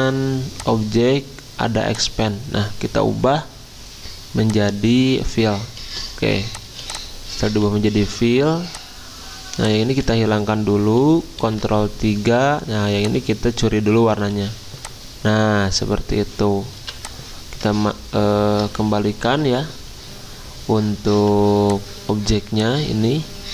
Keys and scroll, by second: 6.3 z, 7.5 v, 10.1 ctrl+z, 11.4 ctrl+3, 14.2 i, 16.8 v, 19.3 ctrl+alt+3, 23.4 ctrl+z.